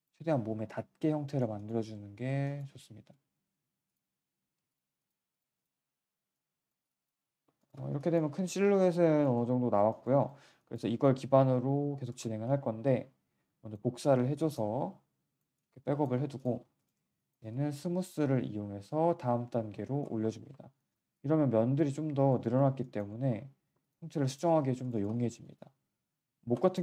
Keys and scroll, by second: 3.1 z, 20.6 q, 23.6 1.